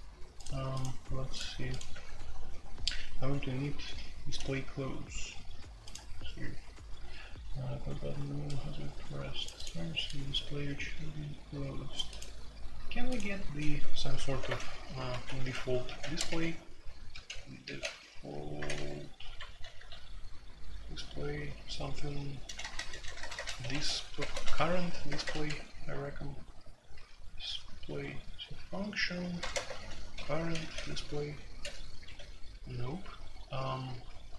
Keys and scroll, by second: 1.9 typing, 14.4 alt+2, 15.1-19.8 typing, 22.4-25.4 typing, 26.8 typing, 29.4-32.0 typing.